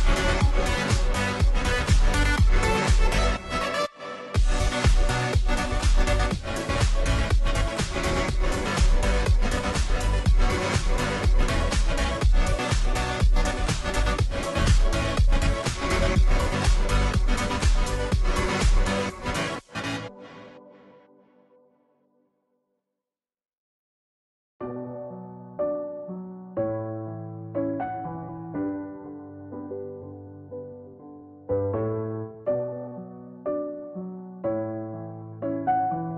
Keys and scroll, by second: 0.0-36.1 typing, 8.0 Return.